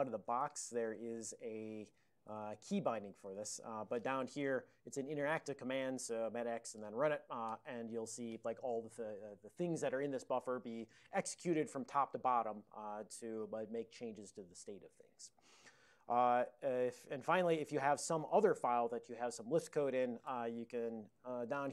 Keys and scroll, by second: 0.0-3.9 typing, 20.8-21.7 typing.